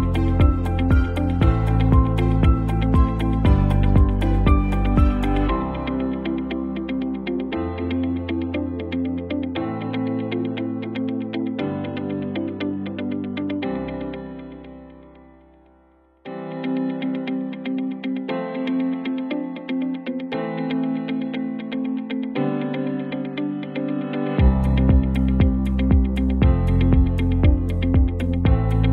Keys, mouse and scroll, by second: 0.9 click, 3.7 click, 5.0 v, 6.1-8.2 drag, 9.4 ctrl+t, 10.3-11.3 drag, 14.1 alt+scroll up 1, 14.9-15.2 alt+scroll down 1, 15.4 scroll up 1, 15.6-16.1 scroll down 1, 16.2 alt+scroll up 1, 17.3 click, 20.8 t, 21.4 click, 22.3-25.0 typing, 25.7 click, 26.2 shift+click, 26.9 v, 27.9-28.9 drag.